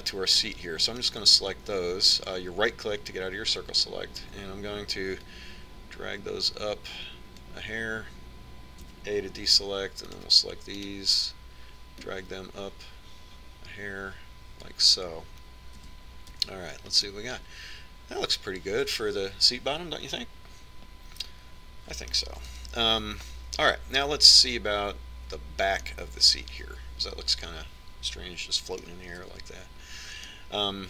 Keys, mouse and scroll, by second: 2.3-6.5 right drag, 6.5-8.4 drag, 10.2 a, 10.9 c, 12.2-14.1 right drag, 13.3 click, 14.1-15.2 drag, 17.1 z, 17.7 Tab, 18.4-20.0 middle drag, 23.9 KP_1, 27.3-29.0 middle drag, 30.6 Tab.